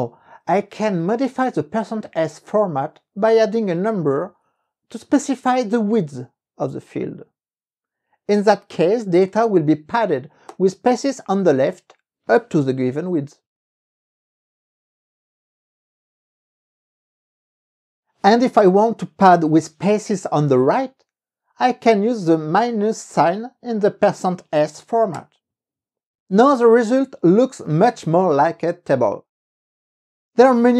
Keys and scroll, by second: 0.6 Up, 1.0 Left, 4.0 KP_1, 4.1 KP_5, 4.5 Right, 5.5 KP_5, 10.7 KP_Enter, 19.2 Up, 19.7 Left, 22.8 KP_Subtract, 25.3 KP_Enter.